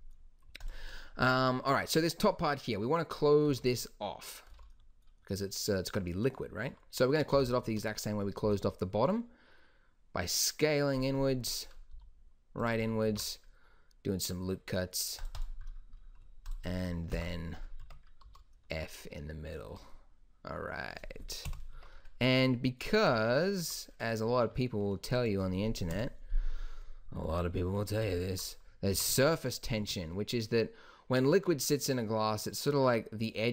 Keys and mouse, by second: 0.8-2.4 drag, 2.4 middle click, 3.6 z, 4.7 z, 7.5 e, 8.6 s, 12.1 s, 13.2 ctrl+r, 17.3 f, 18.0 Tab, 18.4 z, 19.8 z, 21.6 KP_1, 21.9 Tab, 26.0 KP_1, 29.1 g.